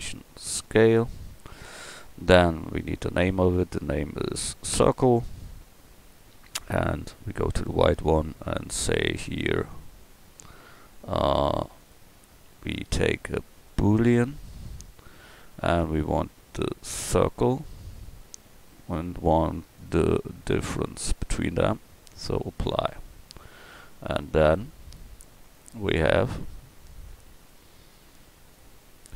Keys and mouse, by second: 2.0-5.7 middle drag, 6.7-7.3 drag, 8.4-11.9 right drag, 24.8-27.1 middle drag, 28.5-29.1 middle drag.